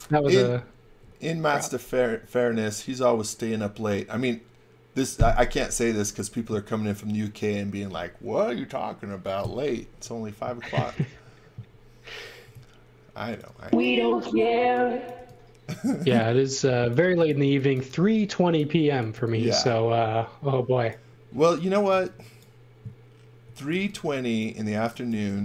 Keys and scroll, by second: 12.4 space, 14.6-17.7 typing, 18.9-19.6 typing, 21.4 x, 21.9 v, 23.4 x, 23.7 v, 24.8 x, 25.1 v.